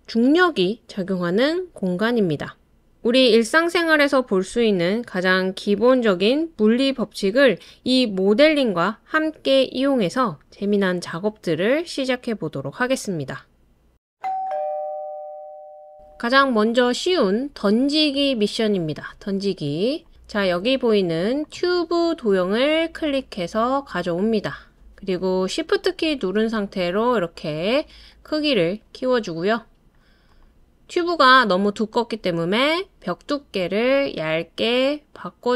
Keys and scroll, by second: 15.4 space, 15.4 BackSpace, 20.1 BackSpace.